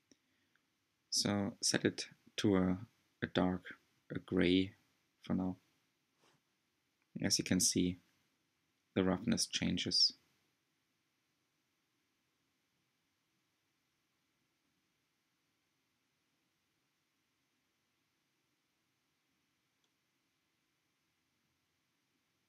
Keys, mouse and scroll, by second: 10.8-11.1 scroll down 2, 11.2-15.1 middle drag, 15.1-15.4 scroll up 2, 15.4-16.1 shift+middle drag, 16.1 scroll up 1, 19.3 ctrl+shift+click, 22.0-22.4 drag.